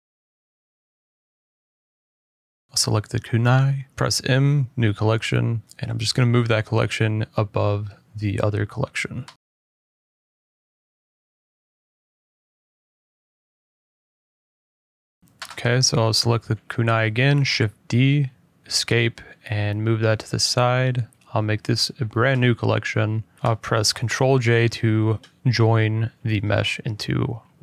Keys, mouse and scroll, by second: 0.6 Tab, 0.6 click, 1.3 click, 1.6 middle click, 2.1 click, 3.0 click, 3.0-3.4 scroll, 5.3 m, 6.1 click, 7.6-8.9 typing, 8.4 click, 8.8 click, 14.4-15.1 scroll, 15.1-15.5 scroll, 15.5 d, 17.2 Escape, 17.8 click, 17.8 g, 18.2 scroll, 18.6 middle click, 19.1 middle click, 19.8 middle click, 20.4 m, 21.5 click, 22.4 typing, 22.8 Return, 23.8 click, 24.0 click, 24.5 middle click, 24.8 ctrl+j, 26.2 middle click, 27.2 click, 27.4 click.